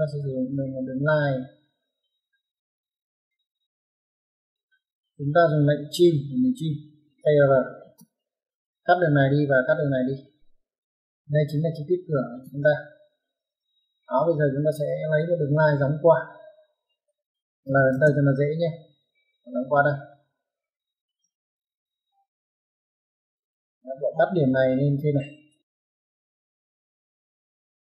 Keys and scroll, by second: 4.2 Escape, 7.1-7.7 typing, 10.4 Escape, 12.2 typing, 17.6 l, 17.8 space, 20.9 space, 22.6 m, 22.7 space.